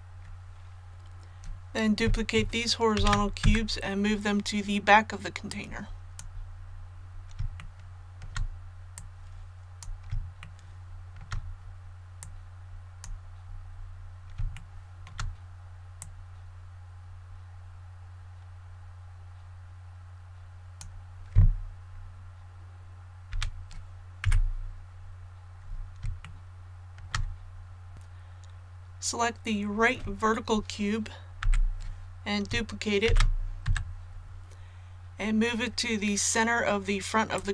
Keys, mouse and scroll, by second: 2.9 shift+d, 5.5 click, 6.4 scroll down 1, 7.6 shift+middle click, 8.9 click, 10.4 shift+middle click, 12.2 click, 13.4 scroll up 1, 14.5 shift+middle click, 16.0-21.7 drag, 23.3 a, 24.2 KP_1, 24.9 scroll down 1, 26.2 shift+middle click, 27.9 click, 33.0 shift+d, 37.3-37.5 drag.